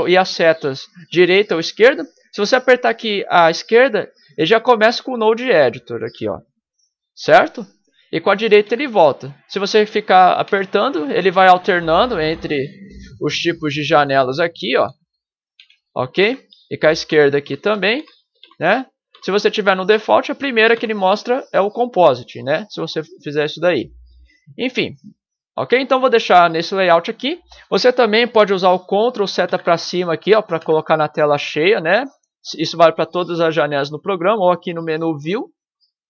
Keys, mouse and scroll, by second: 5.8 ctrl+Left, 8.9 ctrl+Right, 16.2 ctrl+Right, 19.1 ctrl+Left, 20.7 ctrl+Left, 30.6 ctrl+Up.